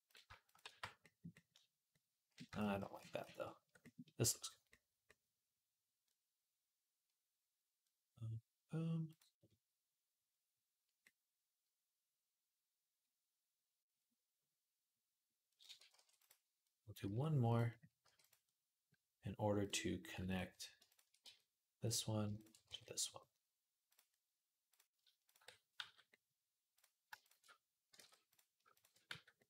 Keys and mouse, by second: 0.4 shift+r, 2.4 ctrl+z, 2.8 ctrl+z, 3.0 ctrl+z, 8.9 click, 9.0-11.7 middle drag, 11.7-18.5 drag, 15.7 ctrl+r, 16.8 s, 17.8 g, 18.5 middle click, 19.4 click, 19.5-20.7 middle drag, 20.7 shift+click, 20.8-22.2 shift+middle drag, 21.0 f, 22.2 click, 22.2 shift+a, 22.3-26.5 middle drag, 22.5 f, 25.6 f, 26.5 click, 26.6-28.5 shift+middle drag, 27.8 ctrl+z, 28.5 click, 28.5 shift+a, 28.7-29.4 middle drag, 28.9 f.